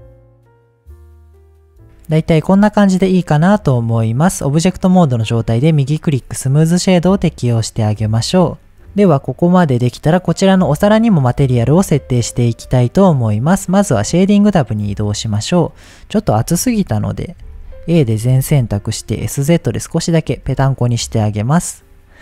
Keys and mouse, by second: 0.0-1.5 shift+drag, 1.7-2.3 middle drag, 2.7 shift+middle drag, 5.4 click, 6.1 middle drag, 7.2-7.7 middle drag, 8.4-9.1 middle drag, 10.3 click, 14.7 middle click, 16.7 Tab, 17.4 a, 18.3 s, 18.4 z, 20.1 click, 20.4 Tab.